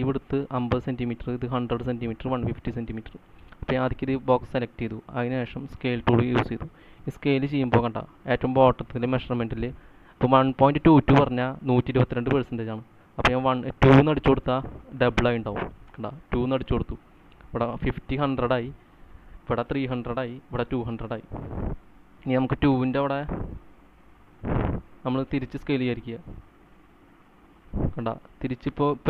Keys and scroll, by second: 15.9 2, 16.2 Return.